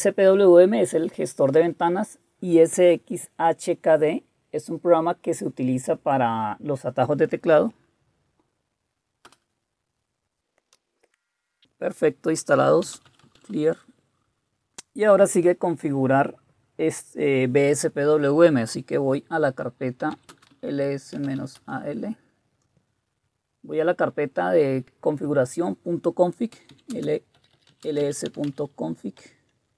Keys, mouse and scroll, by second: 9.2 Return, 10.7 Return, 12.6-13.9 typing, 19.9-21.8 typing, 26.5-29.0 typing, 29.2 Tab.